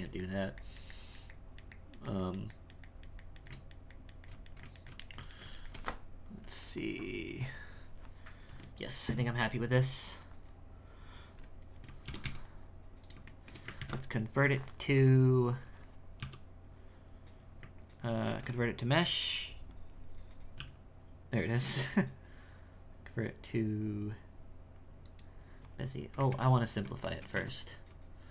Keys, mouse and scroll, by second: 8.5 Tab, 11.8-12.1 scroll down 2, 12.1 shift+c, 13.3 shift+middle click, 13.8 ctrl+a, 16.2 w, 18.2 ctrl+a, 20.6 w, 25.8-26.3 scroll up 3, 26.3 ctrl+z, 27.1 shift+middle click, 27.4 Tab.